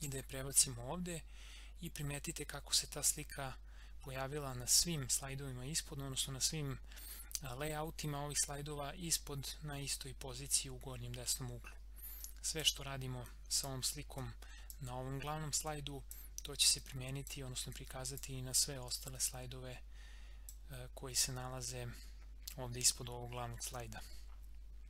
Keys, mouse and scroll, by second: 0.0 ctrl+v, 2.6 scroll down 1, 9.6 scroll up 1, 12.1-22.0 drag, 22.0 scroll down 1, 23.2 scroll up 1.